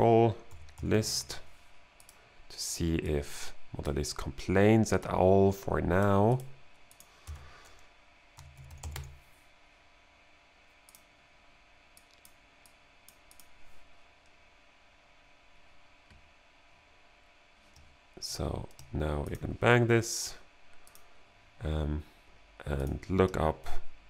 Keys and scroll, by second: 0.0-1.7 typing, 7.3-9.4 typing.